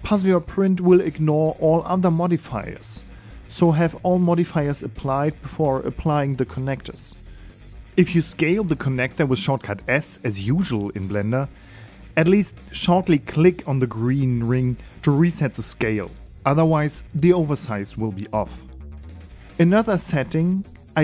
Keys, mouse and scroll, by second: 0.1 click, 0.6 click, 7.4 click, 8.9 s, 16.9 click, 20.4 click, 20.7 right click.